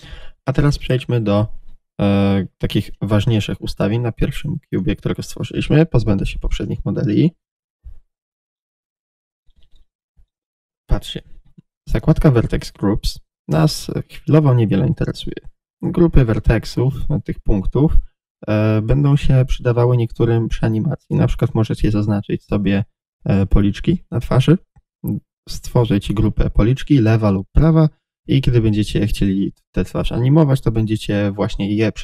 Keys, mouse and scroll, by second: 0.2-2.5 middle drag, 2.5-2.8 right drag, 2.8 click, 3.2 click, 4.6 click, 5.7 Delete, 6.5 click, 8.6-9.0 scroll up 1, 9.4-32.0 middle drag, 10.6-11.9 scroll up 1.